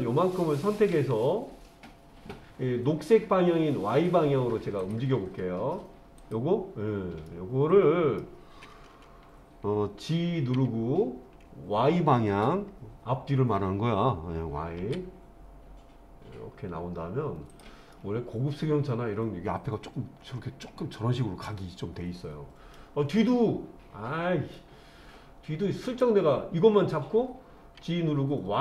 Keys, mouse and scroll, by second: 4.8 click, 6.2 click, 7.3 middle click, 10.5 g, 14.8 y, 17.5 click, 17.9-22.8 middle drag, 23.2-24.5 middle drag, 25.9 click, 27.8 g.